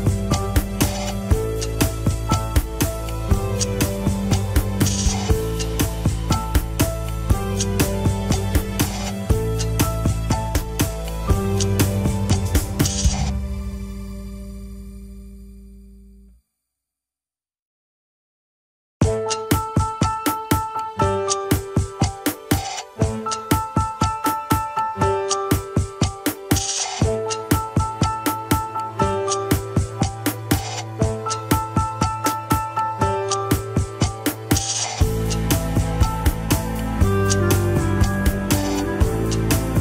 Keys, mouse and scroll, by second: 1.1 alt+z, 1.4 click, 1.7 alt+z, 2.0 r, 3.1 KP_1, 3.4 Tab, 3.6 click, 3.9 scroll up 2, 4.0 Tab, 4.4 click, 4.9-7.5 typing, 5.2 scroll up 1, 6.6 scroll down 1, 7.7 scroll down 4, 7.9 shift+middle click, 8.1 Tab, 8.5 click, 8.7 Tab, 8.9 s, 10.3 s, 11.6-13.7 middle drag, 14.2-16.2 drag, 16.2 scroll up 1, 16.5 middle click, 16.8 KP_1, 16.9 scroll up 2, 17.1 Tab, 17.3 click, 17.5 Tab, 17.7 s, 19.0 KP_3, 19.4 Tab, 19.7 click, 19.9 Tab, 20.9 KP_1, 22.0 Tab, 22.2-22.6 scroll down 1, 22.7 click, 22.9 middle click, 23.2 Tab, 23.4 s, 24.5 alt+z, 24.8 s, 25.2 KP_1, 25.5 Tab, 25.8 click, 26.0 alt+z, 26.1-26.4 scroll up 3, 26.2 shift+middle click, 26.5 Tab, 26.7 alt+z, 27.0 s, 27.5 alt+z, 27.7 middle click, 28.5 Tab, 28.7 alt+z, 29.0 click, 29.4-30.0 middle drag, 30.0 scroll down 1, 30.1 KP_1, 30.5 click, 30.8 scroll up 1, 31.0 shift+middle drag, 31.3 alt+z, 31.5 Tab, 31.7 s, 32.5 KP_3, 33.4 g, 34.3 Tab, 34.5 alt+z, 36.3-36.8 scroll up 1, 36.8 click, 37.2 scroll down 1, 37.4 shift+middle click, 37.7 Tab, 38.0 g, 39.0 KP_1, 39.3 alt+z, 39.6 s.